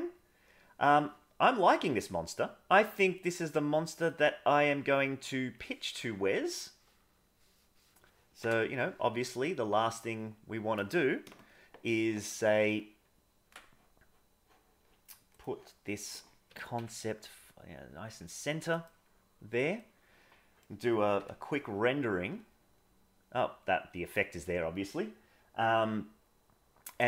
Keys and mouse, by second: 2.8-4.0 drag, 4.6 click, 5.3 click, 6.3 middle click, 7.3 middle click, 8.4 KP_0, 9.7 middle click, 12.9 ctrl+Tab, 15.3 click, 16.5 g, 19.7-20.6 middle drag, 21.2 F12.